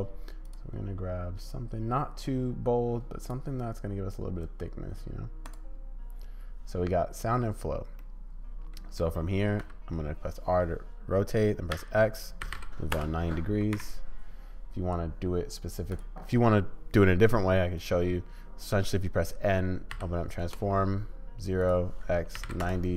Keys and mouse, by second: 8.1 middle click, 9.0 middle click, 9.3 click, 9.6 r, 13.8 n, 16.0-20.9 drag, 21.7-22.9 drag.